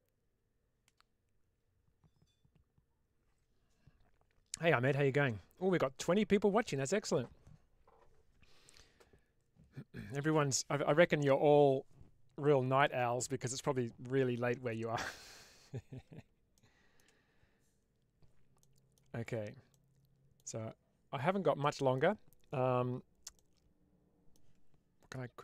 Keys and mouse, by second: 16.4-16.9 shift+middle drag, 18.5 middle click, 19.0 Tab, 19.6 middle click, 20.4 Tab, 21.5-21.9 middle drag, 23.2-24.2 middle drag.